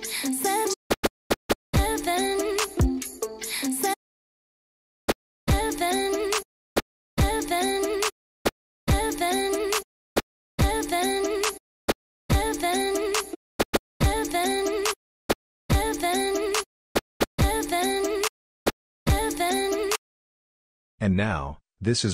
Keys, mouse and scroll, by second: 0.6-2.2 typing, 5.1 f, 5.5 c, 6.7 f, 7.1 c, 8.4 f, 8.8 c, 10.2 f, 10.6 c, 11.9 f, 12.3 c, 13.6 y, 14.0 c, 15.3 f, 15.7 c, 16.9 y, 17.4 c, 18.6 f, 19.1 c.